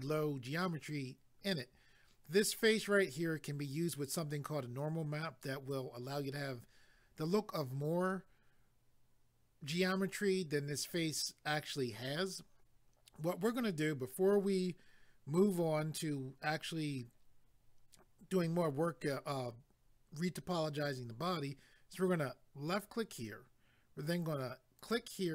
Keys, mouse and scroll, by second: 22.7 click, 24.8 click.